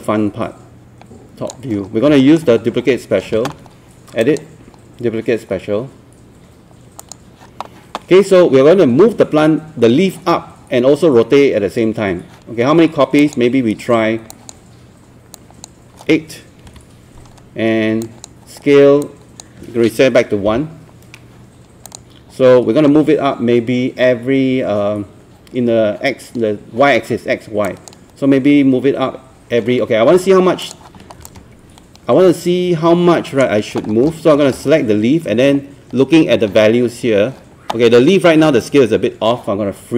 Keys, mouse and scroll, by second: 1.9 scroll down 1, 2.2 alt+middle click, 2.6 scroll up 1, 4.2 click, 16.7 KP_8, 18.1-20.2 drag, 20.5 KP_1, 21.9-33.9 drag, 33.9 scroll down 1, 34.4 scroll up 1.